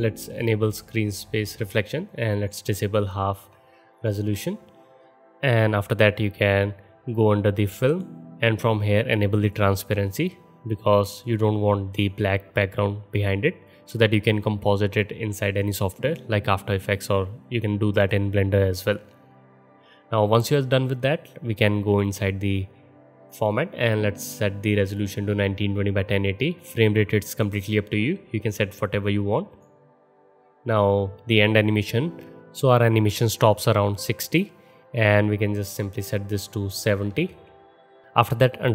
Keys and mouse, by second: 0.7-2.6 middle drag, 0.7-2.6 right drag, 4.0-9.5 middle drag, 4.0-4.7 right drag, 9.5-21.9 drag, 21.9 middle click, 22.1-27.3 drag, 27.3-29.6 middle drag, 29.6-31.6 drag, 31.6-38.7 middle drag.